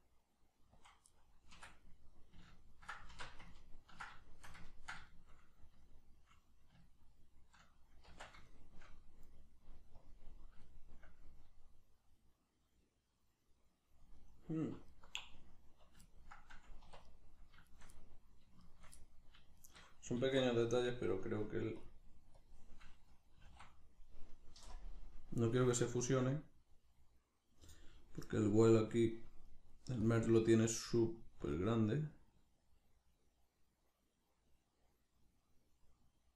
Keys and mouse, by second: 0.9 click, 1.1-10.1 middle drag, 1.5 Tab, 3.1 alt+q, 8.1 Tab, 10.1 click, 10.7-14.9 shift+middle drag, 14.9 alt+right click, 16.1-17.1 ctrl+middle drag, 16.9 1, 17.1 right click, 17.7 shift+right click, 17.9 middle click, 18.6 shift+right click, 19.0 middle click, 19.6 shift+right click, 20.2 alt+q, 20.7 shift+middle click, 21.4 click, 23.4-27.7 drag, 23.4 s, 27.7 right click, 28.7 click, 29.5 middle click, 30.1 click, 30.3-31.4 middle drag, 31.4-36.3 shift+drag.